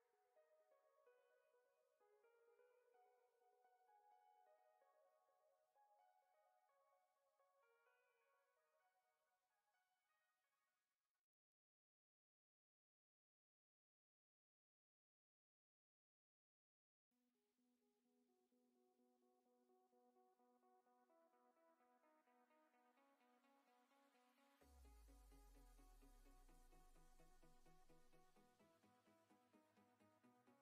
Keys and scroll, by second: 0.8 s, 5.9 s, 11.1 s, 20.4 shift+f, 25.9 s.